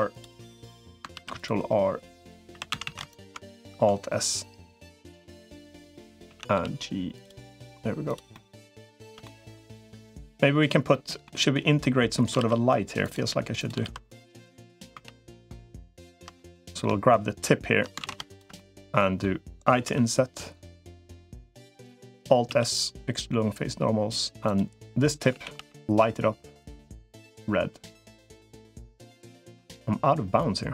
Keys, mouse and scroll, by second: 0.9 ctrl+r, 2.5 3, 2.5 a, 2.7 a, 2.9 alt+shift+click, 3.5 alt+s, 6.1 a, 6.3 g, 8.1 middle click, 9.0 shift+middle click, 9.3 middle click, 10.7 middle click, 11.6 middle click, 12.3 ctrl+r, 13.7 ctrl+r, 14.9 3, 15.1 click, 15.9 shift+click, 16.2 middle click, 17.9 ctrl+shift+z, 18.1 click, 18.3 middle click, 19.7 i, 22.3 alt+s, 25.1 a, 25.3 g, 28.8 shift+middle click.